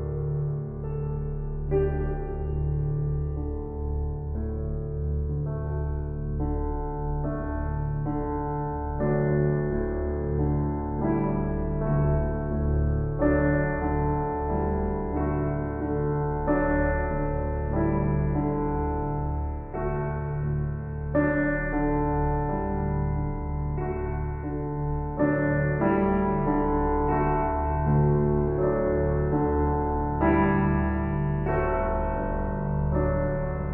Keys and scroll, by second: 22.0 ].